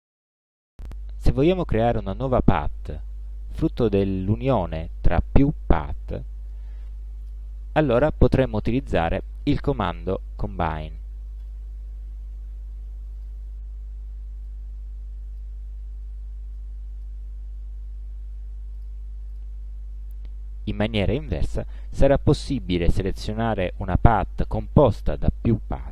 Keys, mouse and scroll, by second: 2.9 click, 3.9 shift+click, 9.2 click, 11.5 click, 13.3 click, 14.6 click, 15.8 ctrl+z, 16.7 ctrl+click, 17.4 ctrl+z, 18.9 click, 19.4 click, 22.7 click.